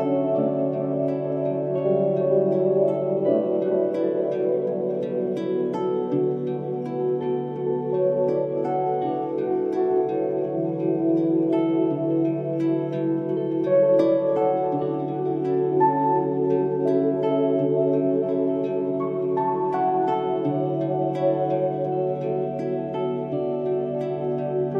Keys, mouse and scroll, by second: 1.3 click, 3.3 click, 4.4 scroll down 1, 5.4 click, 7.1-7.4 scroll down 1, 8.9 click, 9.4 alt+scroll down 1, 10.1 space, 10.2-10.6 drag, 16.1 ctrl+z, 16.3 click, 20.6 alt+scroll down 1, 20.9 space, 21.5 click.